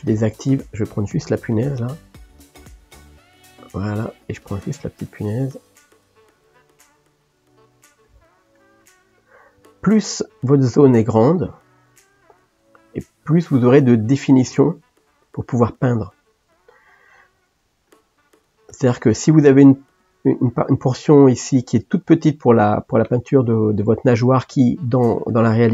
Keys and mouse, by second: 0.2 o, 0.9 click, 2.1 g, 4.3 click, 4.9 g, 6.4 click, 6.6 g, 8.6 click, 8.9 g, 9.9 click, 10.5 g, 11.7 shift+click, 14.7 g, 17.9 click, 18.9 g, 23.5 ctrl+middle click.